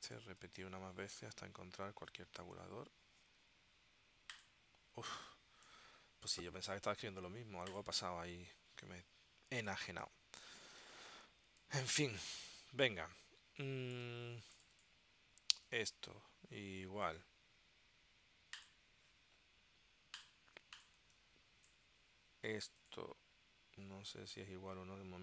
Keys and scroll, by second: 0.7 shift+', 2.0 alt+º, 3.4 t, 10.0 space, 10.9 super+s, 12.6 space, 21.2 space.